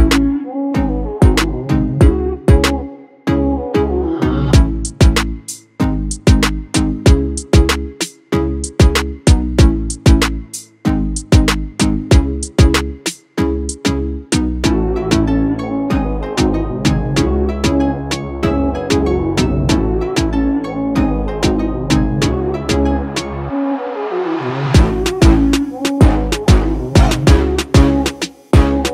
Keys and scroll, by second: 11.4 ctrl+s, 15.5 ctrl+-, 15.6 ctrl+-, 27.0 ctrl+space, 27.2 ctrl+space, 27.7 ctrl+space, 28.8 ctrl+space.